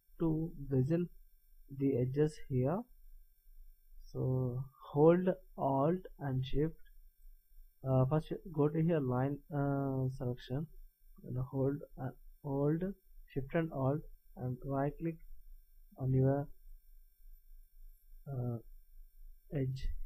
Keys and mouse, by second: 10.2-12.2 middle drag, 15.5-17.4 middle drag.